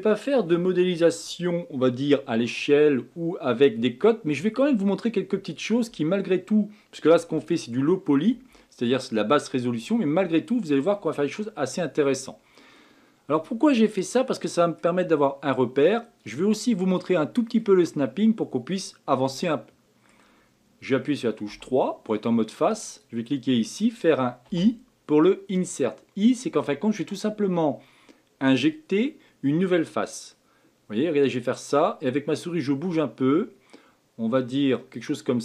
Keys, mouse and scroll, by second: 12.7-15.7 middle drag, 17.6-20.6 middle drag, 22.9 click, 24.4 i.